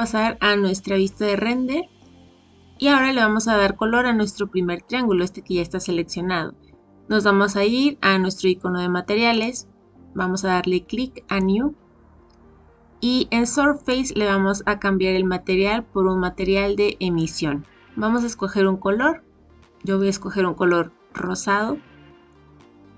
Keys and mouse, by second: 2.6 click, 11.2 click, 13.8-17.4 drag, 18.1 click.